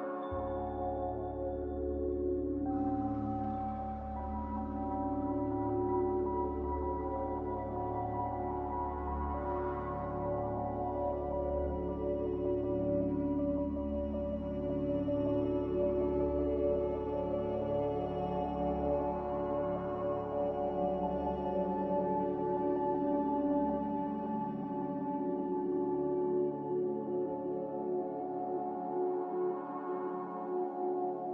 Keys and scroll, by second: 1.4 z, 12.6 x, 14.0-14.8 typing, 14.2 Return, 16.1-17.8 typing, 19.0 Escape, 21.6-22.0 typing, 22.0 Escape, 22.0 Return, 26.0 Escape, 26.2 Escape, 28.4 typing, 28.7 Return.